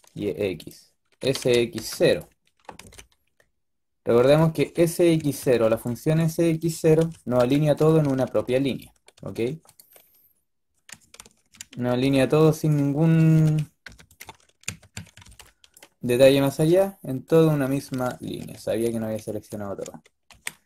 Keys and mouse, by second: 1.1 s, 2.5 g, 4.5-6.5 typing, 7.9 s, 9.2 s, 11.1 ctrl+z, 11.9 b, 13.9-15.1 typing, 17.5 b, 18.1 ctrl+z, 18.4 ctrl+z, 18.7 ctrl+z, 19.1 ctrl+z, 19.4 ctrl+z, 20.2 b.